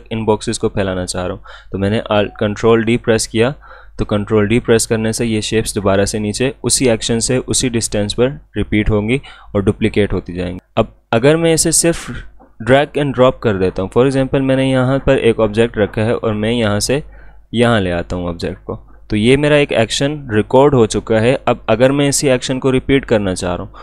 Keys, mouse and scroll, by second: 1.6 ctrl+Num_Lock, 2.9 ctrl+d, 10.6-13.1 drag, 13.1 ctrl+z, 13.8-20.7 drag.